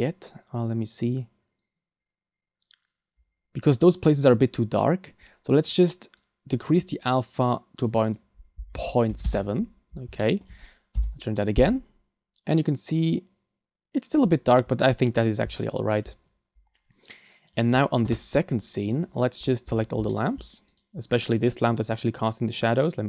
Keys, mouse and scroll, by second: 18.9 click, 18.9 scroll up 3, 19.4-20.1 scroll down 6, 20.1 shift+middle click, 20.7 right click, 21.3 middle click, 22.7 right click.